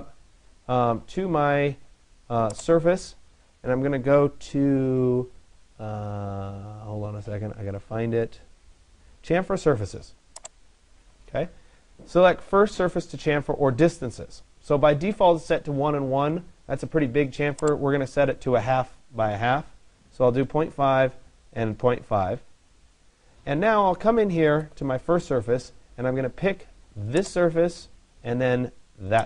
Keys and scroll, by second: 18.7 Delete.